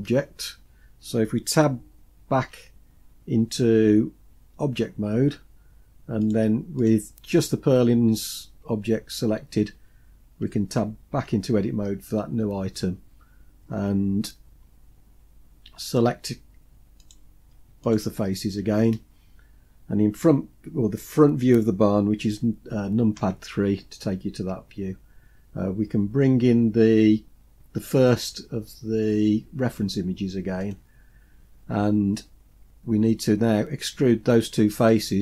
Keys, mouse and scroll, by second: 2.4 Tab, 6.2 click, 6.8 click, 11.1 Tab, 17.0 click, 17.9 shift+click, 23.2 KP_3, 24.7-26.2 scroll up 2, 30.7 click.